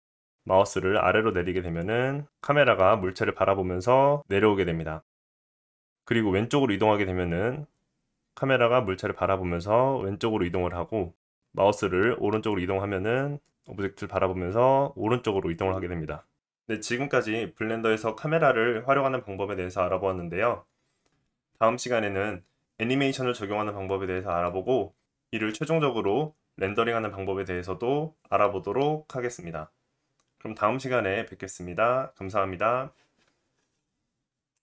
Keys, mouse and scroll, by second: 1.7-3.0 middle drag, 3.0 click, 3.4 middle click, 3.6 click, 3.9-34.6 middle drag.